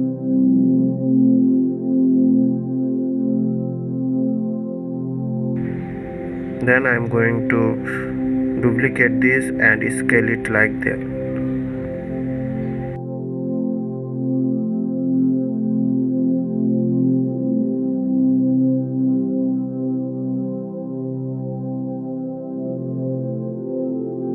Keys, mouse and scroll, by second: 0.3 middle click, 1.3 shift+click, 2.0 shift+click, 2.6 shift+click, 3.2-4.7 middle drag, 4.7 KP_1, 10.1 ctrl+d, 12.2 shift+d, 19.2 s.